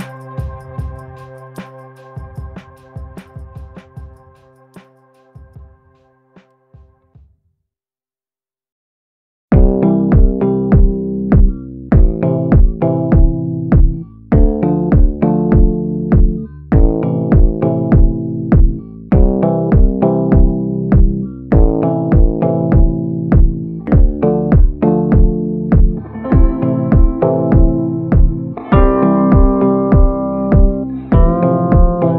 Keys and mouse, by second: 0.0 ctrl+z, 0.3 click, 1.2 ctrl+z, 1.4 click, 1.7-2.2 [, 2.2 click, 2.7 click, 4.0 ], 4.3 [, 4.5 click, 5.0 ctrl+z, 5.2 ], 5.5 ], 5.6 click, 7.1 click, 7.5 [, 7.7 click, 8.6 ctrl+z, 9.0 ctrl+z, 9.2 click, 10.0 ctrl+z, 10.2 click, 10.6 click, 12.0-15.0 typing, 12.5 click, 13.1 ctrl+z, 13.6 ctrl+z, 14.2 click, 14.9 ctrl+z, 15.2 click, 20.8 middle click, 21.7 middle click, 22.5 shift+middle click, 23.0 middle click, 24.3 ctrl+i, 24.9 b, 25.9 b, 26.8 b, 27.9 b, 29.1 middle click, 31.1 b, 31.9 b.